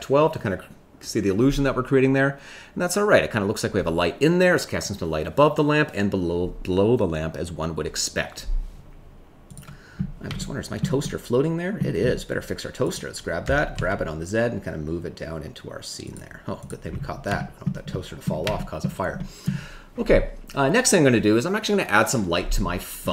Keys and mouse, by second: 10.3 shift+middle click, 11.0 middle click, 12.8 click, 13.4 g, 13.7 z, 16.5 click, 17.3 shift+middle click, 17.9 middle click, 18.5 shift+middle click, 19.1 middle click, 23.0 middle click.